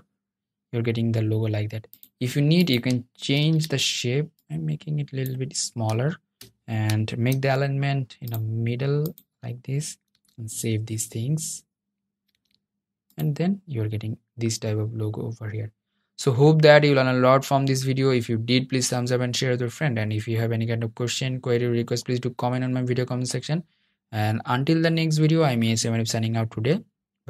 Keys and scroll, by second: 2.4 super+t, 6.4 super+a, 9.2 super+s, 11.4 super+d.